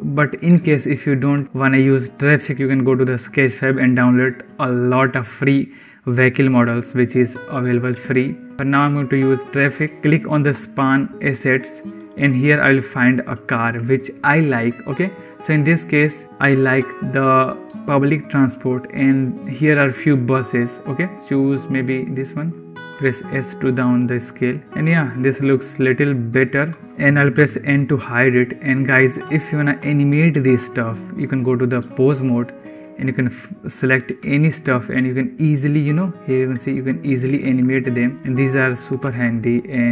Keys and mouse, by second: 1.3 click, 11.2-22.6 drag, 21.1 Delete, 22.8 s, 26.3 click, 27.2 n, 27.8-28.6 drag, 29.4 shift+click, 31.2-32.0 drag, 32.6 click, 33.9 g, 37.3 ctrl+z, 37.7 click, 38.1 g, 38.9 ctrl+z.